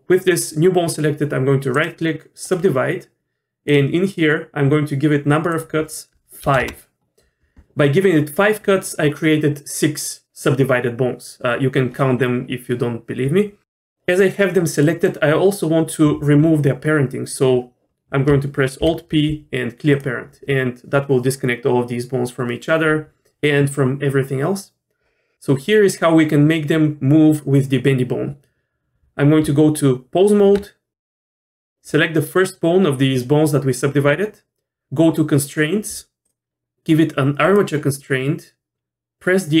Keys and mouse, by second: 1.8 right click, 3.7 click, 5.6-7.1 drag, 14.8 middle click, 18.8 alt+p, 29.4 Tab, 31.1 click, 36.3-37.5 drag.